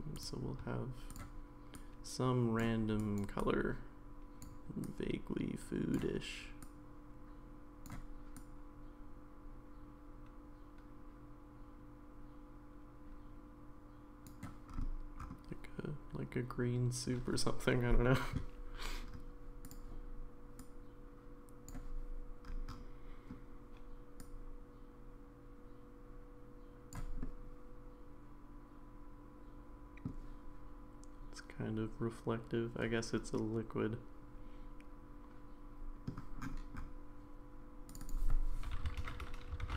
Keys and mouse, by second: 0.2 drag, 24.2-26.9 drag, 27.2-30.1 middle drag, 33.3-36.1 middle drag, 38.0-39.7 drag.